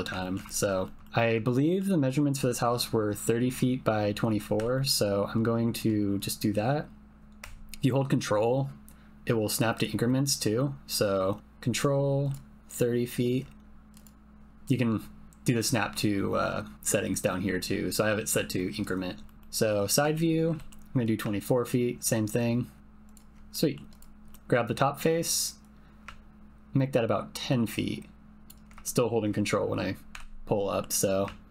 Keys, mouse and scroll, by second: 0.2 ctrl+click, 0.5 shift+click, 0.8 shift+click, 1.4 ctrl+click, 4.5 s, 13.9-19.1 drag, 19.2 middle click, 19.4 KP_Decimal, 20.1 ctrl+click, 20.5 s, 23.0 ctrl+click, 23.5 click, 24.3 click, 28.9 shift+middle click, 30.1 e.